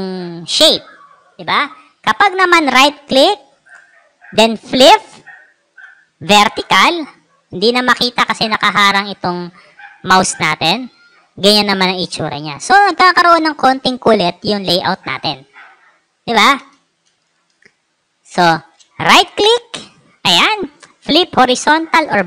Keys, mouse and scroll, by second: 2.1 right click, 6.9 click, 17.0 space, 17.4-18.5 drag, 19.3 right click.